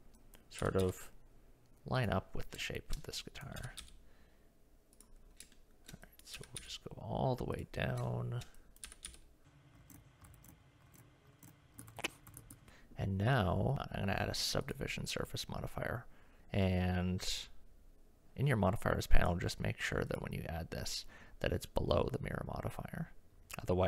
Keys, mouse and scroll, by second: 0.6 g, 2.6 shift+middle click, 3.2 click, 3.6 g, 5.5 shift+middle click, 6.2 click, 6.4 g, 8.1 shift+click, 8.7 click, 8.9 g, 9.8 click, 10.2 shift+g, 10.4 click, 10.8 g, 10.9 click, 10.9 g, 11.3 click, 11.7 g, 11.8 Tab, 11.9 shift+middle click, 12.3 shift+middle click, 12.5 Tab, 13.7-14.7 drag, 19.3-20.2 drag.